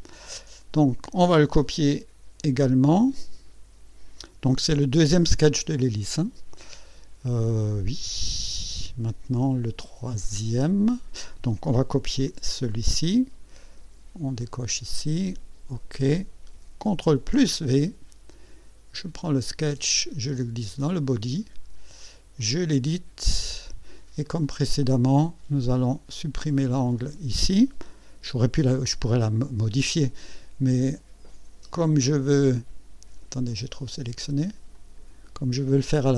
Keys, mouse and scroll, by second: 12.7 ctrl+c, 14.4 click, 15.7 click, 17.1 ctrl+v, 19.2-21.0 drag, 22.4 click, 23.3 scroll up 2, 24.2 right click, 27.0 click, 31.9 click, 33.5 click, 34.7 click, 35.4 Delete.